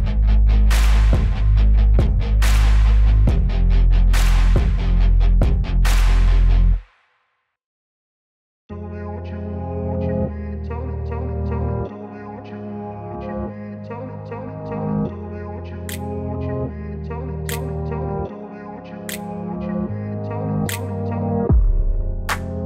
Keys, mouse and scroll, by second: 0.6-1.7 typing, 0.7 click, 0.9 click, 3.3 [, 3.4 [, 8.9 space, 9.0 click, 9.1 space, 11.2 click, 12.4 [, 12.6 ], 18.7-19.9 typing, 21.6-22.1 typing, 21.7 click.